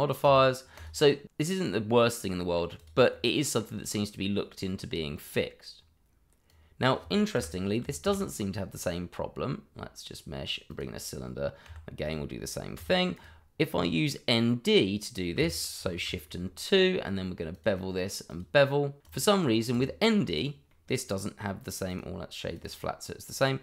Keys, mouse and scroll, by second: 0.2 click, 1.6 scroll down 1, 1.8 middle click, 3.7 click, 4.9 middle click, 6.4 click, 7.3 Delete, 8.0 shift+a, 10.7 click, 11.6 g, 12.0 click, 12.7 r, 13.1 click, 15.8 shift+2, 17.5 click, 20.4 middle click, 20.6 click, 21.3 middle click, 22.0 right click, 22.5 click, 23.2-23.6 scroll up 1.